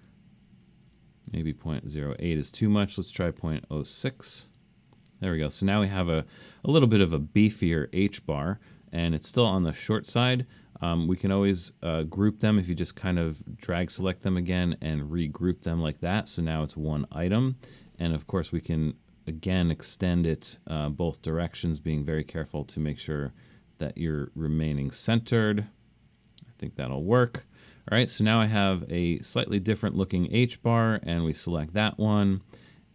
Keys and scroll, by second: 3.8 6.